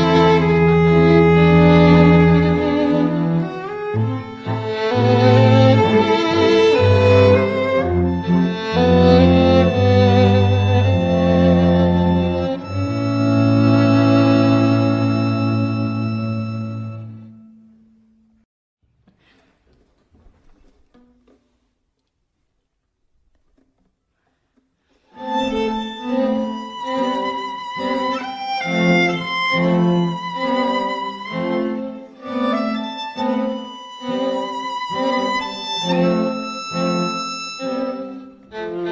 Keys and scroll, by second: 9.4 [, 10.3 ], 15.1 ], 15.6 ], 16.6 ], 19.7 [, 19.9 [, 25.8 [, 26.0 [, 26.2 [, 28.8 ], 29.0 ], 30.5 ], 37.6 [, 38.1 [, 38.5 ], 38.8 ].